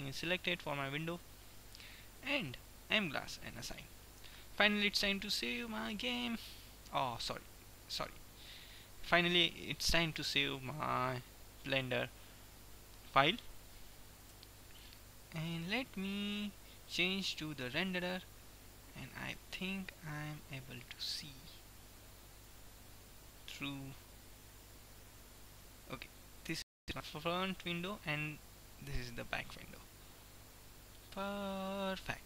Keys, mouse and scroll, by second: 2.1-4.1 drag, 3.6-6.8 middle drag, 5.1 ctrl+s, 14.5 Tab, 16.8-18.6 drag, 20.5-22.0 middle drag, 23.0-24.8 middle drag, 30.1-32.2 middle drag.